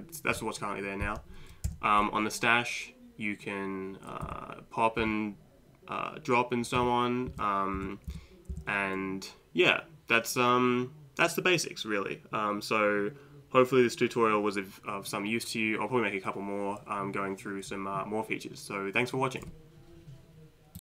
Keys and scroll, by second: 1.7 Right, 4.3 Down, 5.0 Up, 6.8 Down, 7.3 Up, 7.8 Left, 8.1 Left, 8.5 Left.